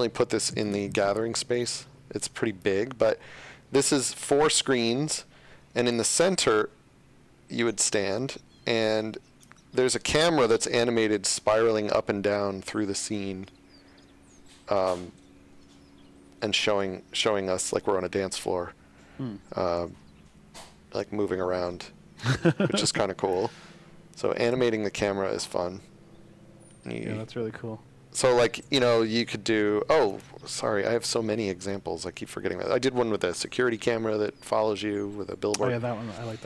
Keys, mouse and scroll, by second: 3.3-4.5 shift+scroll, 4.9 shift+scroll, 5.1 shift+w, 6.6-7.1 scroll, 7.2-7.7 scroll, 8.9-9.4 scroll, 9.8 click, 10.0-11.0 typing, 24.3 space, 28.3 click, 30.0 click.